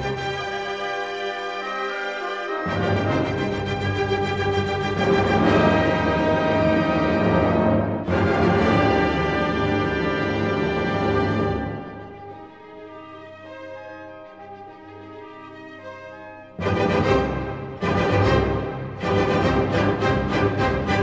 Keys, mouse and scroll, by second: 1.0 click, 3.5-3.8 scroll, 5.8 scroll, 6.8 click, 8.2-9.4 scroll down 4, 9.7-10.9 drag, 12.1-12.4 scroll down 1, 12.4 middle click, 16.0 scroll, 18.0 click, 19.0 right click, 20.4 click.